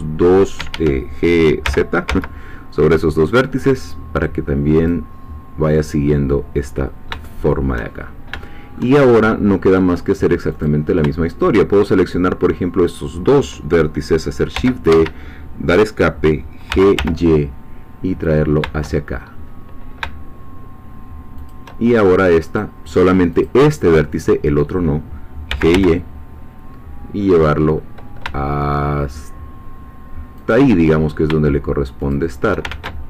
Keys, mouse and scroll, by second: 0.6 Escape, 1.7 g, 2.1 z, 4.8-6.8 drag, 6.8 scroll down 1, 7.2 shift+middle click, 8.0 shift+scroll up 1, 8.4 shift+middle click, 9.0 shift+scroll up 1, 10.5 click, 12.0-14.5 shift+drag, 14.5 shift+d, 14.9 Escape, 16.7 g, 16.9 y, 21.4 shift+click, 22.6 click, 25.5 g, 25.7 y, 30.4 shift+click, 32.0 shift+click, 32.7 ctrl+shift+z.